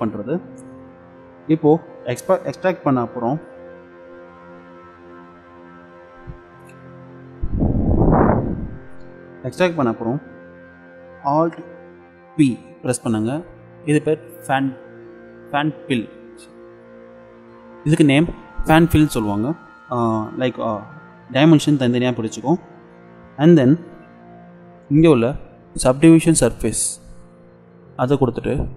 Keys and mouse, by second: 12.3 alt+p, 26.4-28.0 drag, 28.1 middle click.